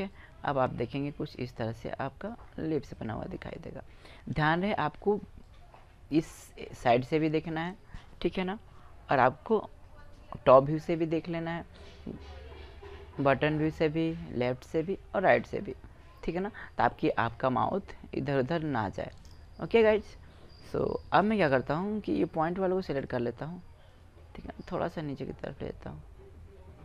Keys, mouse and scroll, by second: 2.2 middle click, 5.2-7.0 drag, 7.5-8.7 middle drag, 9.9 click, 10.0-11.4 middle drag, 12.2 middle click, 12.6 middle click, 12.9 middle click, 16.9-18.5 middle drag, 19.5-22.2 right drag, 22.8-24.6 drag, 23.7 right click, 25.6 click.